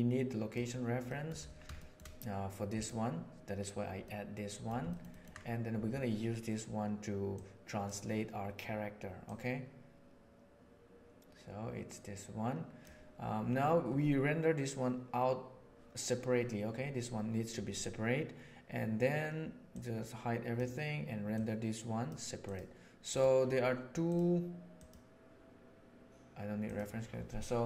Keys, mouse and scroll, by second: 1.0 middle click, 1.7 shift+middle drag, 4.0-4.6 middle drag, 4.8 ctrl+middle click, 5.0 ctrl+middle click, 7.3 right click, 7.5 middle drag, 9.2-12.8 middle drag, 19.6-20.5 middle drag, 21.3-23.1 middle drag, 26.6 middle click.